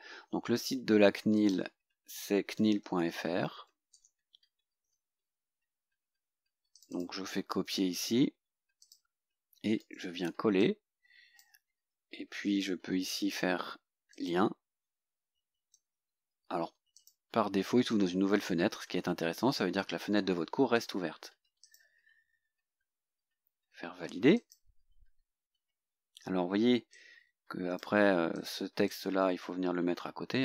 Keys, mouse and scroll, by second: 1.4 click, 2.2-4.4 typing, 6.8 click, 7.7 ctrl+c, 8.9 click, 9.9 ctrl+v, 10.7-11.7 drag, 14.2 click, 15.8 ctrl+v, 17.0 click, 21.7 click, 23.0-23.7 scroll down 2, 24.4 click, 25.7 scroll down 1, 26.0-27.0 scroll up 1, 27.0-28.1 drag, 28.4 click, 29.0-30.4 drag.